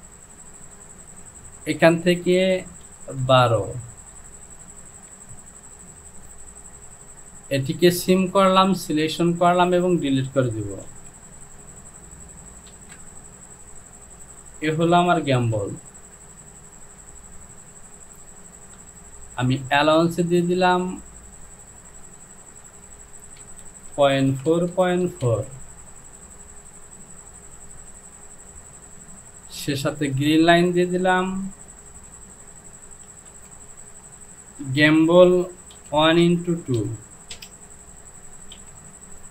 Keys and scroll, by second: 1.6 Down, 2.9 KP_1, 3.2 KP_2, 3.9 Down, 12.8 shift+a, 15.6 Home, 24.0 KP_Decimal, 24.3 KP_4, 24.6 Down, 24.8 KP_Decimal, 25.1 KP_4, 25.3 Down, 31.9 Home, 33.2 e, 33.4 m, 33.4 b, 33.4 l, 34.7 space, 35.8 KP_1, 36.3 x, 36.8 KP_2, 37.4 Return, 38.6 j.